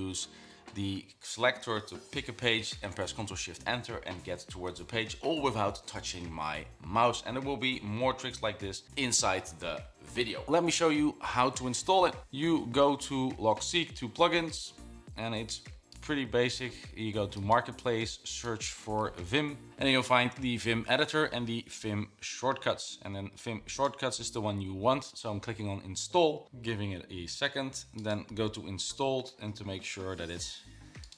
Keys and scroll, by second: 0.0-0.6 typing.